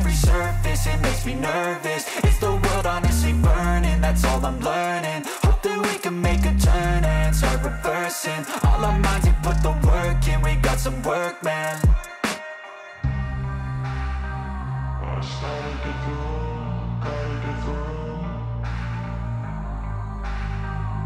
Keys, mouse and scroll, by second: 3.4 p, 5.2 middle click, 5.2-6.2 scroll, 5.8 middle click, 7.4 click, 13.3 click, 14.7 click, 19.6 click, 20.7 scroll.